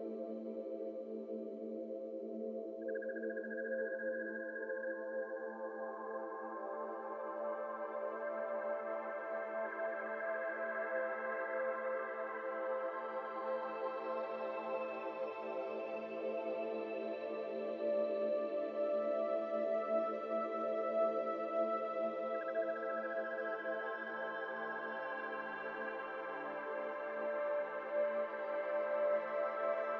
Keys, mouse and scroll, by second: 1.7-17.2 drag, 18.5-19.0 scroll down 1, 19.0 z, 20.4-21.3 middle drag, 21.3 n, 22.0 n, 23.0-25.4 drag, 25.4-25.7 scroll down 2, 25.7-27.7 middle drag, 27.7-29.9 drag, 28.3 middle click.